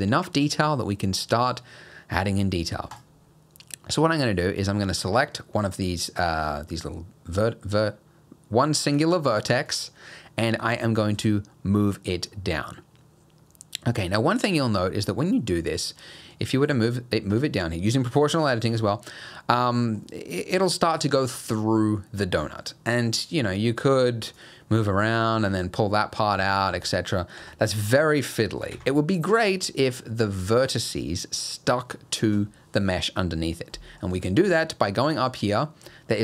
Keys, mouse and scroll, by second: 2.9 click, 4.0-4.9 scroll up 1, 5.3 middle click, 5.9 scroll up 1, 6.5-7.4 scroll down 1, 9.7 click, 11.0 g, 18.7 g, 24.5 middle click, 25.4 g, 27.6 middle click, 28.3 middle click, 28.7 ctrl+z, 33.7 middle click, 34.3 shift+middle click.